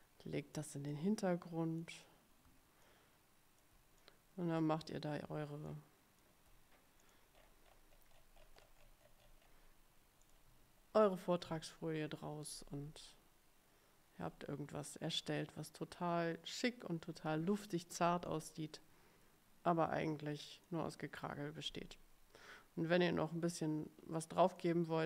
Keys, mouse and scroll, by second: 1.0-2.1 drag, 2.9-3.9 ctrl+drag, 4.1 click, 5.8 ctrl+click, 7.1 click, 7.5-9.8 scroll up 6, 10.4 click, 18.4-21.0 drag, 24.7 middle click.